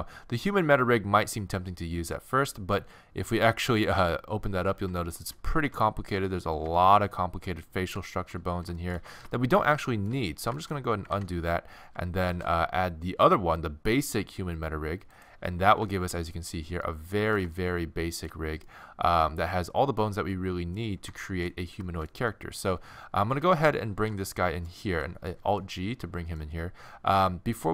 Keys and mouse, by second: 4.6 middle click, 5.0 middle click, 6.2-8.2 middle drag, 11.2 ctrl+z, 12.3 shift+a, 15.9 middle drag, 18.0-18.6 middle drag, 21.3 middle drag, 22.0 middle click, 23.9 alt+g, 25.4 z.